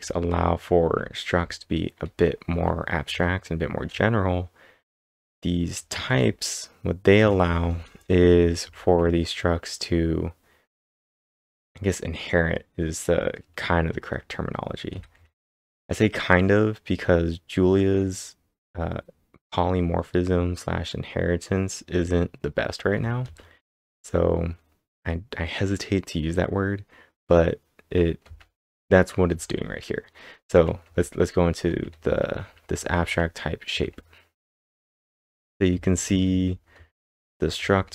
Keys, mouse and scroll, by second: 0.0-5.3 typing, 7.2 typing, 14.9 typing, 17.3 typing, 22.9 typing, 28.2 typing, 30.6-37.9 typing.